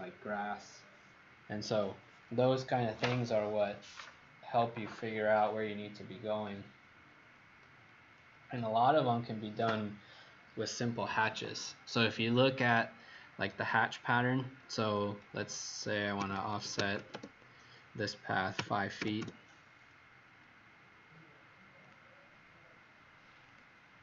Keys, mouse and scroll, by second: 15.8-17.3 typing, 18.5 KP_5, 18.9 ', 19.1 Return, 21.8 click.